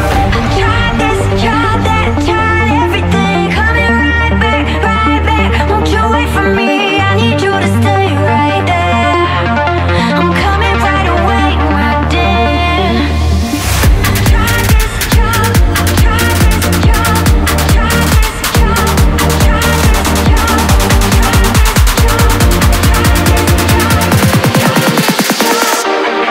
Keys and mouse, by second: 1.1 click, 2.6 click, 4.8 click, 6.1 click, 6.6 click, 7.0 click, 8.3 click, 10.5 click, 11.2 click, 12.7 click, 14.6 shift+middle click, 15.1 ctrl+s, 15.5 a, 15.6 a, 16.0 shift+click, 17.2 ctrl+s, 17.5 a, 17.6 a, 19.0 click, 20.8 click, 23.4 click, 25.6-26.3 drag.